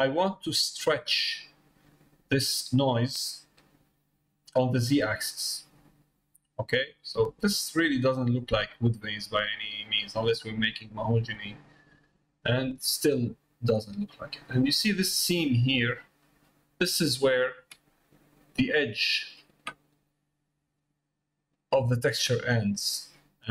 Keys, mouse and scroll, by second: 2.7 click, 6.2 middle click, 7.6 middle click, 8.9 middle click, 10.1 middle click, 11.0 middle click, 12.2 middle click, 12.7 middle click, 13.3 middle click, 13.8 middle click, 14.7 middle click, 17.5 Tab, 18.7 click, 20.4 middle click, 21.4 middle click.